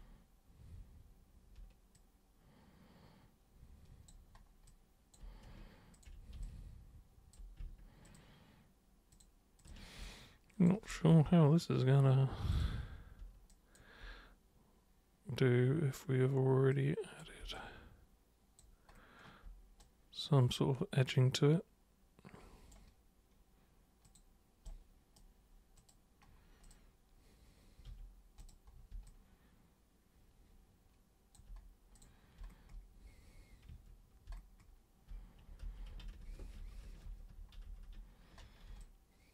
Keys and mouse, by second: 1.9-4.1 alt+drag, 4.6 alt+super+click, 5.9 ctrl+shift+super+click, 6.4 alt+super+click, 8.1 ctrl+shift+super+click, 9.1 ctrl+shift+super+click, 9.6 ctrl+shift+super+click, 10.0 alt+super+click, 12.5 super+click, 13.5 alt+super+click, 16.7 click, 17.5-18.6 alt+drag, 19.8-22.7 right drag, 24.0 click, 24.6 right click, 25.8 super+click, 26.6 super+click, 27.8 super+3, 28.4 super+click, 29.0-31.3 alt+super+drag, 32.0 super+click, 33.7 super+1, 35.6 ctrl+super+z, 35.9 ctrl+super+z, 36.1 ctrl+super+z, 36.3 ctrl+super+z, 36.6 ctrl+super+z, 36.8 ctrl+super+z, 37.3 ctrl+super+z, 37.6 ctrl+super+z, 38.8 alt+super+click.